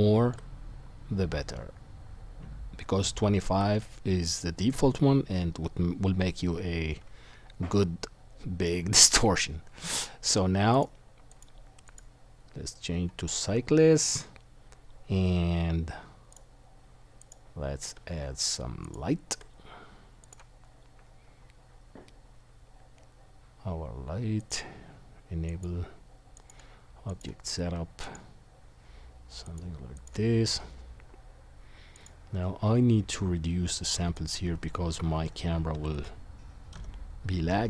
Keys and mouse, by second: 1.9-10.7 shift+drag, 11.3-16.4 drag, 17.2 click, 25.5-28.4 drag, 32.0-34.2 drag.